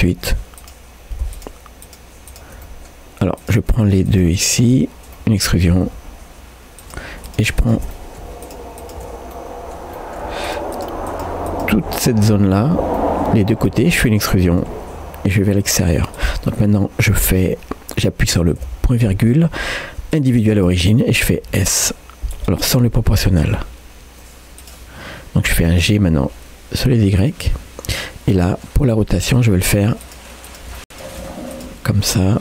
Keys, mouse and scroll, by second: 0.0 3, 0.6 click, 1.4-2.6 shift+drag, 2.6 middle click, 3.4 click, 4.7 middle click, 4.8-5.2 scroll up 1, 5.2 middle click, 6.0 e, 7.3 click, 7.6 shift+click, 7.9 middle click, 8.4 shift+click, 9.3 middle click, 10.0 middle click, 10.5 shift+click, 12.3 middle click, 13.0-14.1 middle drag, 14.9 e, 16.5 middle click, 18.6 ., 28.4 middle click, 28.8-29.4 scroll up 1, 29.4 click, 29.7-30.8 shift+drag, 30.8 middle click, 30.8 r, 31.2 g, 31.9 middle click.